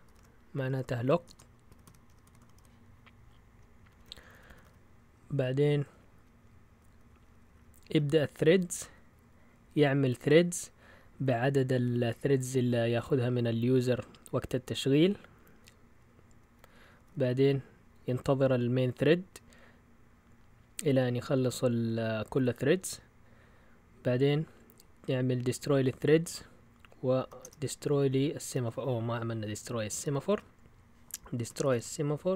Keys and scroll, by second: 0.1-6.8 typing, 11.2 typing, 16.7-18.0 typing, 23.9 Down, 24.2 Down, 24.3 Down, 26.3 Down, 27.1 Up, 27.4 Return, 27.9 Down, 28.0 Down, 28.5 Up, 29.4 End, 30.3 Return, 31.4-32.3 typing.